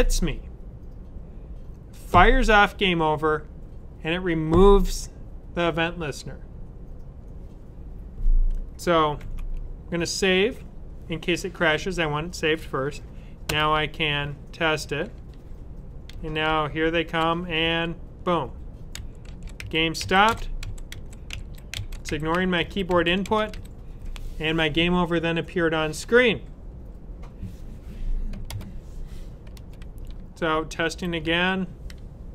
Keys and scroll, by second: 9.1 super+s, 14.5 Up, 19.9 Up, 20.1 Left, 20.5 Down, 21.1 Right, 21.6 Up, 21.7-23.4 typing, 22.2 Right, 29.9 Up.